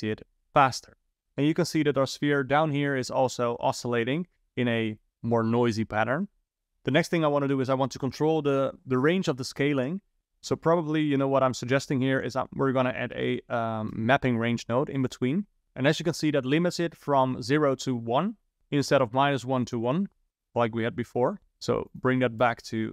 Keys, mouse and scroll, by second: 10.2 shift+a, 10.5 shift+a, 18.6 shift+Left, 19.0 space, 21.9-22.9 drag.